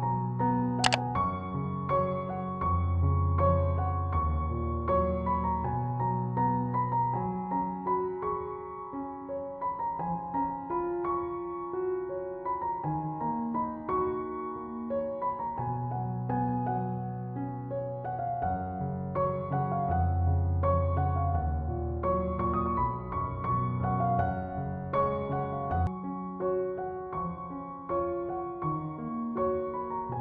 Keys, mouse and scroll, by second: 9.0-12.7 drag, 12.7 ctrl+z, 14.4-30.2 drag.